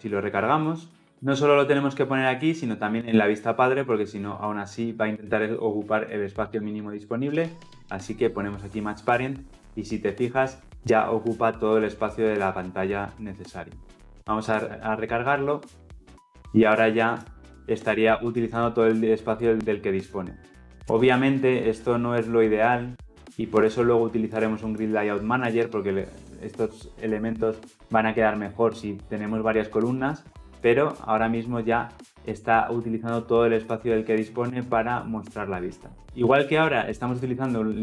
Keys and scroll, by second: 1.1 Return, 7.2 Tab, 14.5 ctrl+F10.